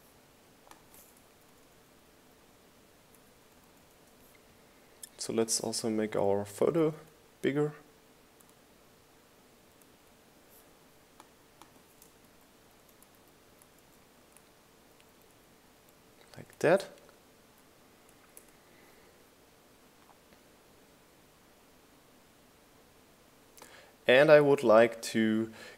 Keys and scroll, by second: 3.1 Down, 5.2 Up, 8.6 Up, 10.2 Up, 11.5 Up, 12.4 Up, 14.6 shift+Right, 15.0 Left, 15.8 Up, 16.1 Right, 16.7 Up, 17.6 Down, 18.3 Right, 18.6 Left, 20.3 Right.